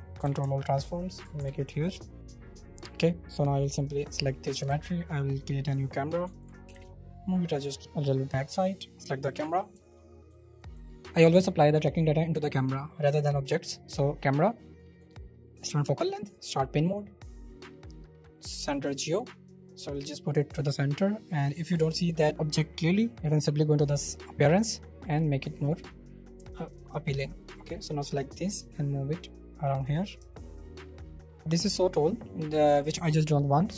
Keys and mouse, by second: 0.1 g, 0.4 z, 1.1 ctrl+click, 1.6 ctrl+a, 5.0 shift+a, 6.6 space, 7.1 click, 8.2 click, 9.8 shift+middle click, 10.0 middle click, 10.6 middle click, 13.8-15.0 drag, 15.5 click, 16.4 drag, 18.6 click, 24.3 click, 25.1 click, 26.5-29.8 shift+middle drag, 30.4 shift+middle click, 31.1 shift+middle click.